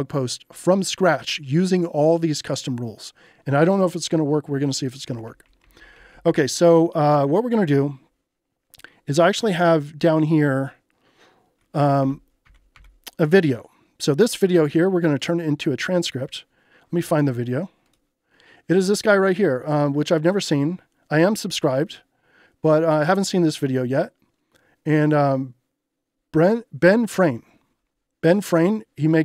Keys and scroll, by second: 4.9-5.9 typing, 9.4 ctrl+j, 11.5-12.4 typing.